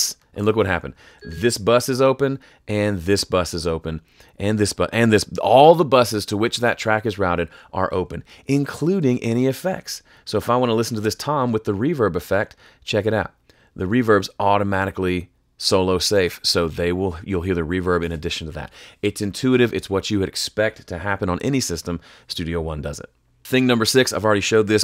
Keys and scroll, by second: 11.0 s, 16.2 shift+super+s.